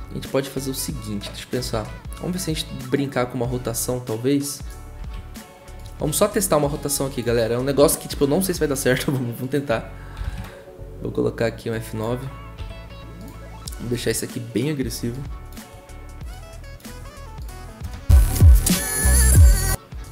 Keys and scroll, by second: 1.7 r, 5.0 ctrl+z, 9.9-10.7 typing, 12.6 F9, 17.8 0.